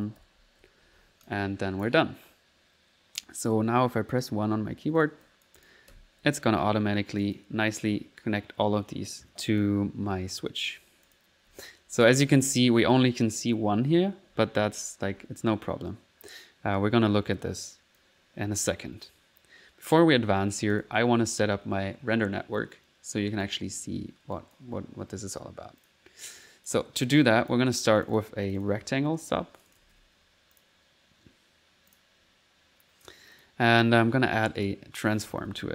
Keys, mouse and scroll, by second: 0.0-0.6 typing, 1.8 shift+click, 2.1 shift+click, 2.7 middle click, 4.2 typing, 4.2 click, 5.0-6.0 drag, 6.0 1, 6.8 middle click, 7.2 click, 9.5 click, 10.3 click, 11.1 click, 11.3-12.3 typing, 13.8-15.5 typing, 18.0-19.2 drag, 19.3 click, 20.8 ctrl+click, 21.0 ctrl+s, 21.3 click, 21.5 middle click, 27.3 click, 28.0 click, 28.6 click, 28.7 ctrl+r, 28.8 click, 28.8-30.5 typing, 29.3 Escape, 29.6 click, 30.6 click, 31.9 click, 33.4 click, 33.6 middle click, 34.6 right click, 35.1-35.7 typing.